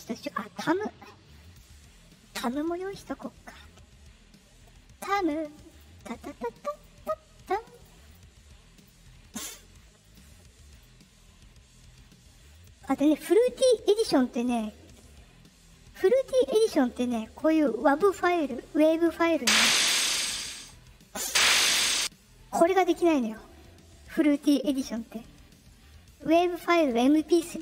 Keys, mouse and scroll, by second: 1.3 click, 5.6 click, 6.7 click, 7.6 click, 8.0 click, 8.7 click, 10.0 click, 10.7 click, 12.5 click, 19.3-20.6 drag, 21.2 click, 25.0-26.8 drag.